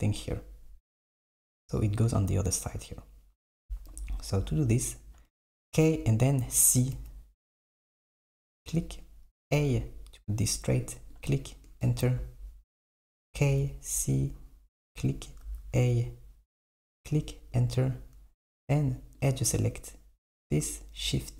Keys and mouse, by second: 3.9 KP_7, 5.7 k, 13.3 k, 19.3-20.5 drag.